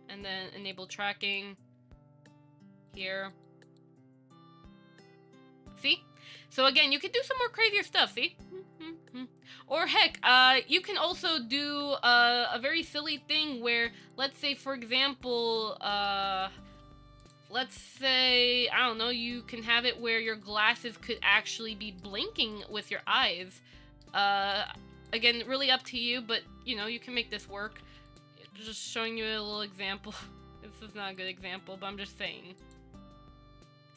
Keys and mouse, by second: 1.4 click, 3.1 click, 3.9 click, 10.9 click, 11.4 Tab, 15.2 shift+middle click, 15.8 middle click, 18.1 KP_1, 18.5 c, 21.1 shift+middle click, 21.4 middle click, 23.0 shift+middle click, 25.0 z, 26.0 KP_1, 27.2 z, 28.7 s, 31.8 Tab, 32.9 click.